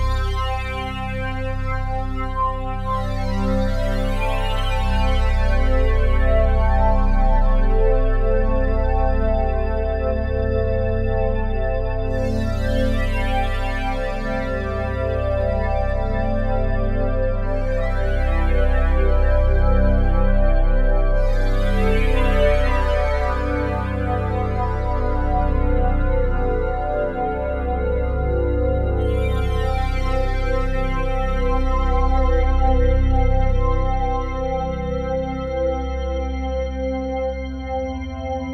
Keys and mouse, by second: 0.0 1, 1.4-5.9 ctrl+alt+drag, 7.1 shift+space, 8.1 click, 8.8 click, 11.6 shift+space, 12.3 click, 17.5-18.1 shift+drag, 19.1 click, 21.5-22.0 shift+drag, 23.6 click, 25.0 click, 26.4 click, 27.4 typing, 28.0 click, 29.8 shift+drag, 30.3 shift+click, 31.1 shift+click, 31.8 shift+click, 34.3 click, 38.1 shift+s.